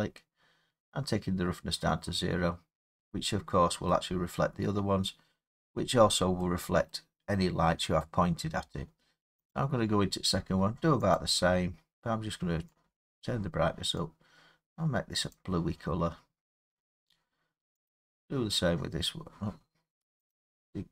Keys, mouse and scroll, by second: 2.6-3.0 scroll down 1, 3.0 middle click, 3.9 middle click, 5.2 middle click, 5.2 middle click, 5.8 scroll, 5.9 scroll down 6, 6.9-9.0 middle click, 9.5 click, 11.2 click, 13.2 click, 15.3 click, 17.9 click, 20.3 click.